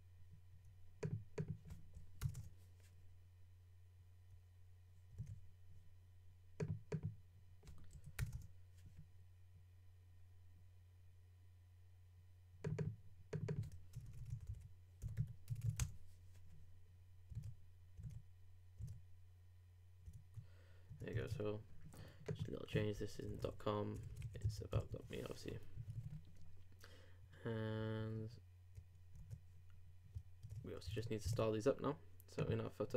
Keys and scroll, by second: 5.2 super+w, 17.4 super+w, 20.1 super+Tab, 21.1 shift+super+Tab, 27.8 super+s, 28.1 super+Tab, 29.2 super+r, 30.4 super+Tab, 31.3 super+Tab.